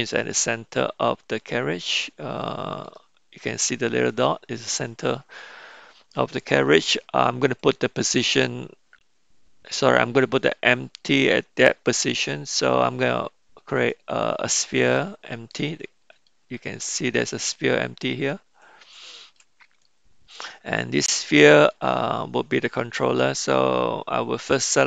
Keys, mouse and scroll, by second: 0.7-2.9 middle drag, 10.3-14.1 drag, 16.1 middle click, 19.1-19.4 shift+middle drag, 19.9-21.7 middle drag.